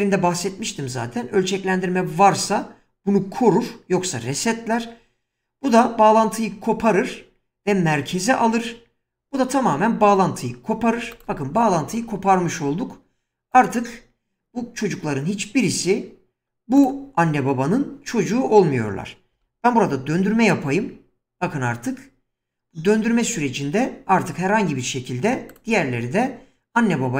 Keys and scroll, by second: 19.4 r, 20.1 z.